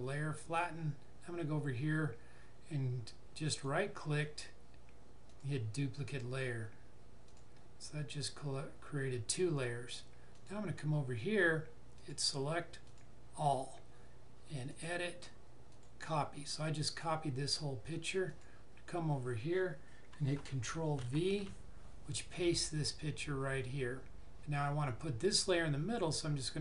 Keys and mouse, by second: 3.4 right click, 5.2 click, 10.3 click, 18.2 click, 26.3 click.